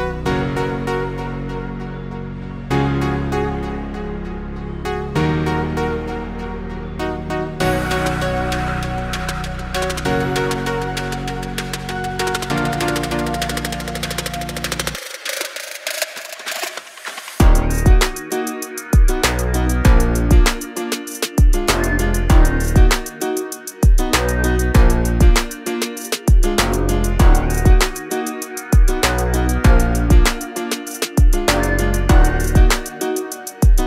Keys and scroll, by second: 3.7 Right, 4.0 Left, 7.7 Right, 8.1 Left, 9.6 Right, 9.9 Left, 11.7 space, 13.1 s, 17.2 space, 17.3 Escape, 20.3 Escape, 21.1 m, 21.9 Up, 24.3 space.